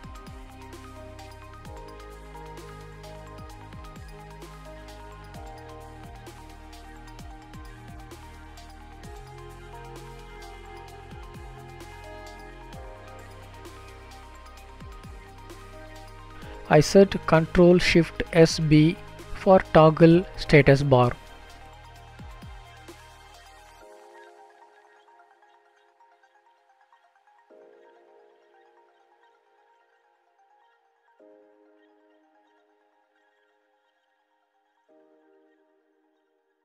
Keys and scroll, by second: 25.0 ctrl+shift+s.